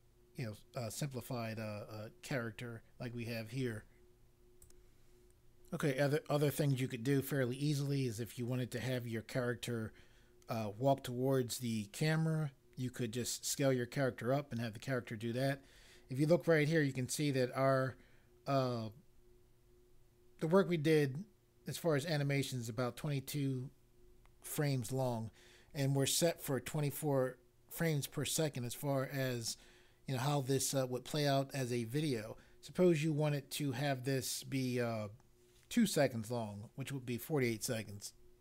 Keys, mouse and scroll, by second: 4.6 click.